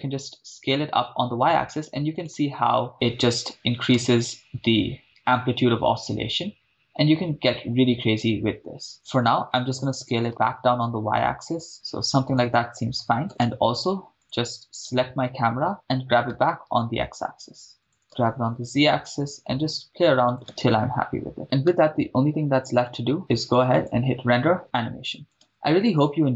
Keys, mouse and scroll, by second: 0.0 y, 2.2-2.9 drag, 2.9 middle click, 4.2 shift+space, 9.1 shift+space, 9.9 s, 10.3 y, 11.7 shift+click, 12.3-12.7 drag, 13.3 shift+space, 13.5 shift+space, 14.2 click, 15.0 click, 15.0 right click, 15.7 click, 16.3 g, 16.7 x, 17.9 click, 18.0 shift+space, 18.0 g, 18.2 z, 20.3 click, 20.5 shift+space, 21.7 shift+space, 23.7-25.2 drag, 25.6 shift+space.